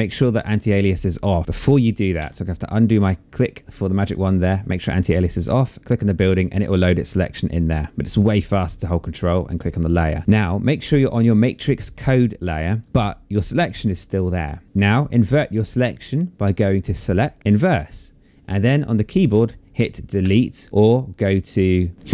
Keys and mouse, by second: 1.5 ctrl+d, 3.3 click, 4.9 click, 10.2 click, 16.1 click, 17.4 click, 19.6 Delete, 21.9 click.